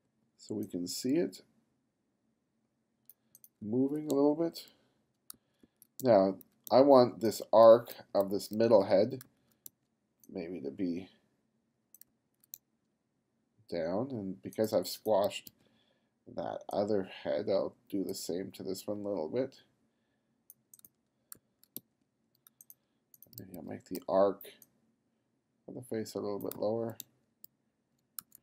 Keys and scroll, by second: 0.1 b, 3.7 f, 4.2 g, 5.4 f, 6.0 g, 6.7 g, 7.7 b, 9.3 f, 9.7 g, 12.1 f, 12.6 g, 15.3 b, 20.9 f, 21.8 g, 23.4 b, 26.6 f, 27.1 g, 28.3 f.